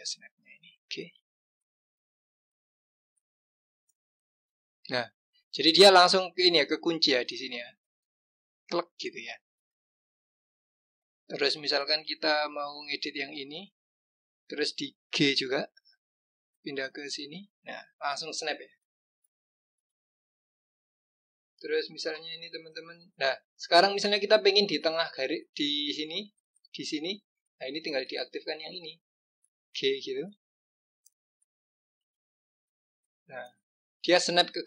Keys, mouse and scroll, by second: 1.2 g, 12.7 click, 15.3 g, 19.6 click, 22.7-25.5 scroll down 1, 25.5 click, 28.2 click, 30.4 g.